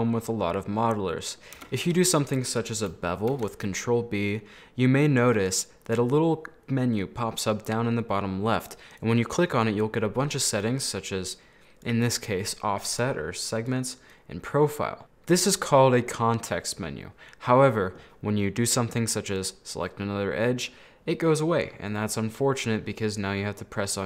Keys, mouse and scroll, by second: 0.5-1.0 scroll up 3, 1.0 middle click, 1.7 2, 1.9 right click, 2.5 middle click, 3.4 ctrl+b, 9.0-15.0 drag, 19.5-20.5 right drag, 20.5-24.0 middle drag.